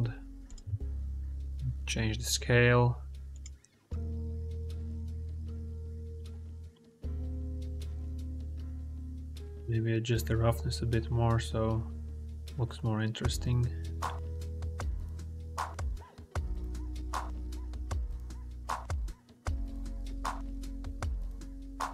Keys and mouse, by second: 0.6 s, 3.5 ctrl+z, 3.8 s, 5.3 middle click, 6.0 middle click, 6.6 click, 9.0 click, 10.1-15.9 drag, 16.9 g.